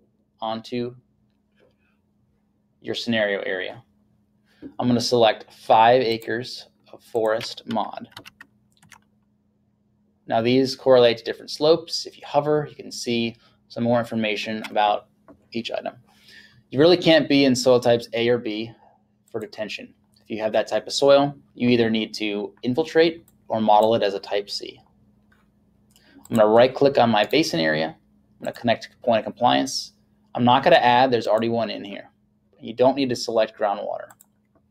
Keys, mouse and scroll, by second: 6.2 click, 8.2 5, 8.9 Tab, 19.3 click, 23.3 click, 26.3 click, 27.3 right click, 28.6 click, 31.3 click, 34.1 click.